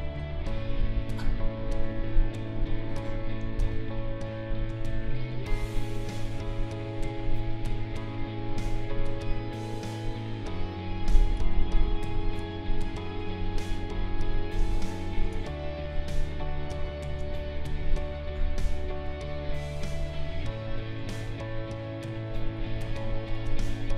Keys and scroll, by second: 0.1 ctrl+z, 3.6 ctrl+z, 11.4 space, 14.5 space, 22.7 space.